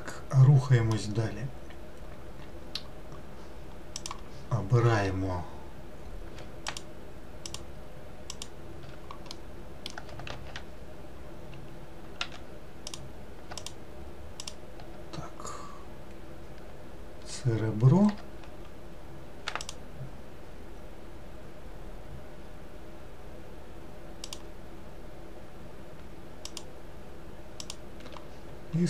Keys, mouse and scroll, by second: 4.0-6.9 drag, 7.5 ctrl+click, 8.4 ctrl+click, 9.3-10.3 middle drag, 10.3 alt+z, 12.2 w, 12.9 click, 13.6 alt+click, 14.4 alt+click, 19.7 shift+click, 24.3 shift+click, 26.5 shift+click, 27.6 shift+click.